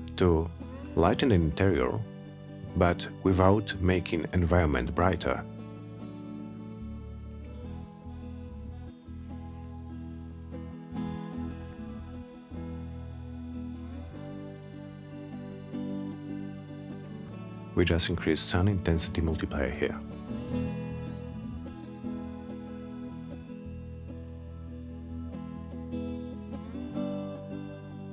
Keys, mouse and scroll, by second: 6.5 click, 10.9 click, 12.2 click, 12.5 click, 15.1 click, 17.1 Return, 22.4 click, 23.9 Return.